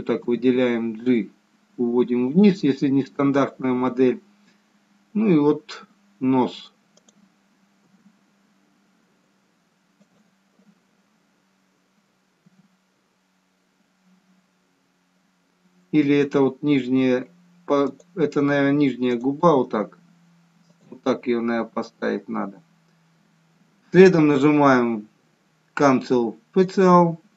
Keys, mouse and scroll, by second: 0.4 g, 7.3 click, 8.0 g, 12.7 g, 19.2 click, 19.7 g, 21.9 scroll down 1, 22.8 scroll down 3, 27.0 click.